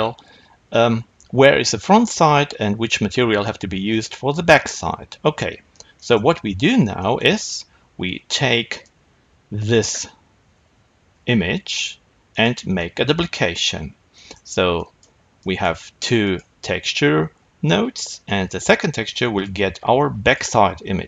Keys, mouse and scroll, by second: 8.6 click, 9.5 click, 11.1 shift+d, 14.7 click, 15.3 click, 16.1 click.